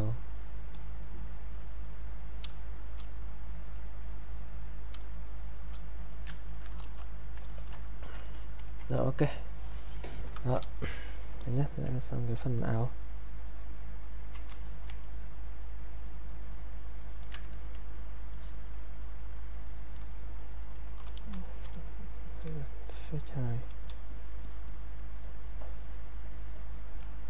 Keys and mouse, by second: 0.0 click, 2.5 space, 2.8 click, 5.0 space, 6.0 click, 6.4 ctrl+right click, 6.7 click, 7.5 alt+click, 7.8 ctrl+right click, 8.3 alt+click, 10.2 click, 11.6 alt+click, 14.7 alt+click, 15.0-17.0 ctrl+right drag, 17.5 alt+click, 18.3 click, 23.4 click, 23.5 click.